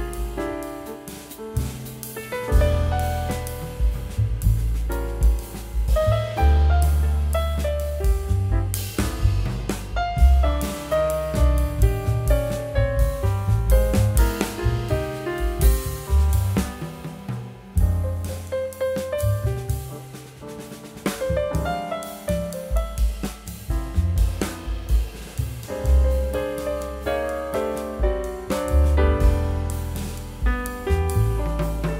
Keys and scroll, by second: 4.7 ctrl+z, 16.1 Return.